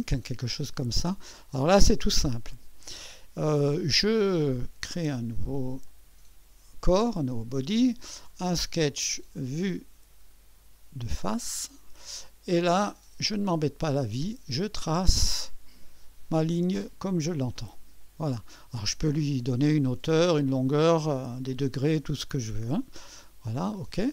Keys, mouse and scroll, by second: 1.9 click, 5.8 click, 8.3 click, 9.5 click, 11.2 click, 12.2-14.2 right drag, 14.2 click, 16.0 click, 18.0 click, 18.7 click, 23.8 click.